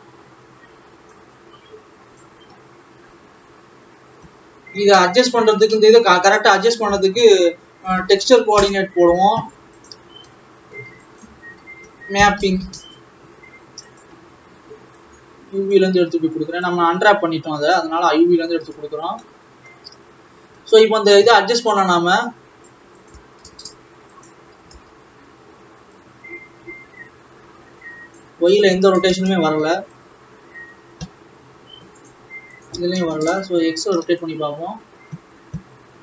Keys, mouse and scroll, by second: 4.0-4.3 scroll down 1, 4.6-5.0 scroll down 4, 11.2-13.0 drag, 15.0-18.0 drag, 19.2 ctrl+s, 19.4 middle click, 20.2 scroll up 1, 20.7 alt+a, 22.0-36.0 drag.